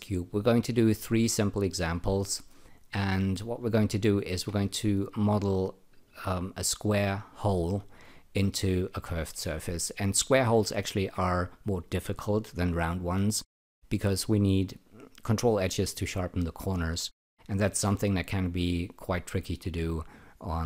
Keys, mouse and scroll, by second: 2.3 alt+middle click.